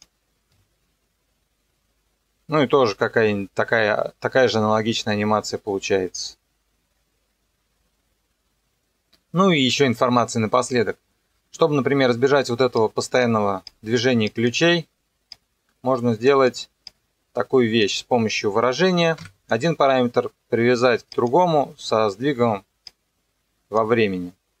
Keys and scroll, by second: 0.5 KP_0, 19.2 Delete.